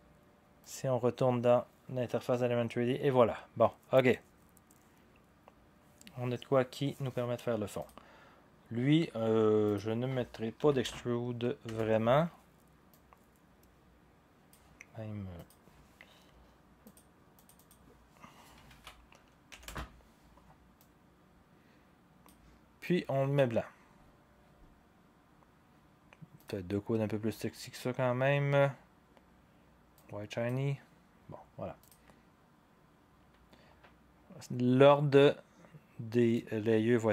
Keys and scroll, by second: 10.6 1, 11.6 Return, 18.7 ctrl+a, 19.5 typing, 19.6 Return.